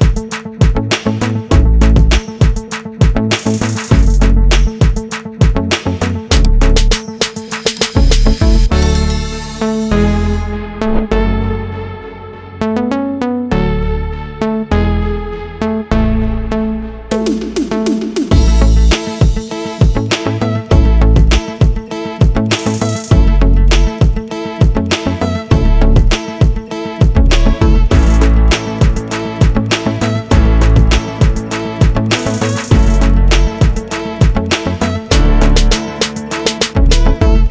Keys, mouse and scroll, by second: 1.1 click, 2.1 click, 4.6 click, 6.7 F4, 8.6 F9, 11.4 click, 11.8 double click, 12.5 ctrl+click, 15.0 click, 15.7 click, 16.2 ctrl+click, 16.5 scroll up 1, 18.1 F8, 18.5 click, 21.1 h, 22.0 i, 24.0 click, 26.1 u, 30.3 click, 32.9 click, 33.2 double click, 34.3 ctrl+z, 35.0 ctrl+z, 35.7 ctrl+z, 36.4 click, 37.0 scroll down 1.